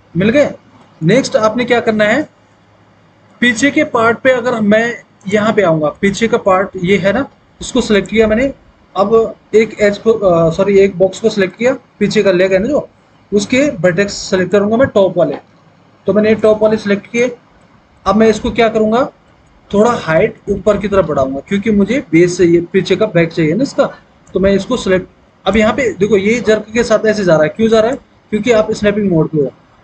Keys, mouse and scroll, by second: 2.2 alt+w, 3.7 alt+w, 18.9 alt+w, 19.9 alt+w, 25.9 ctrl+z, 28.2 ctrl+z.